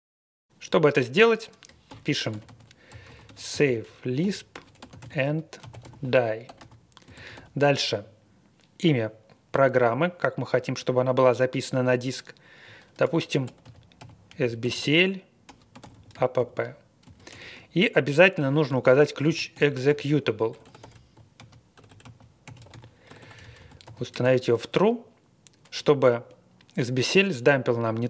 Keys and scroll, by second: 1.6-7.3 typing, 12.8-24.2 typing.